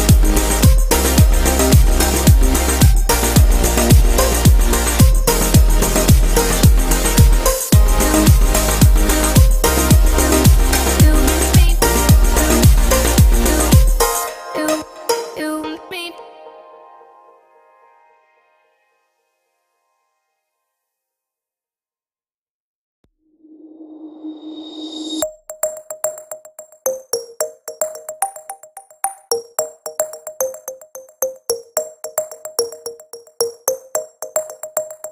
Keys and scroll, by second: 31.3 ctrl+j.